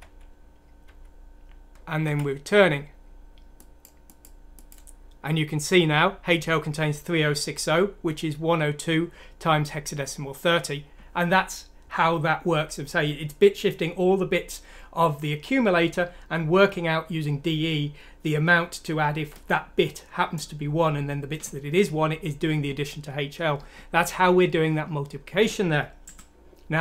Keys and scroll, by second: 0.0 F7, 2.0 F7.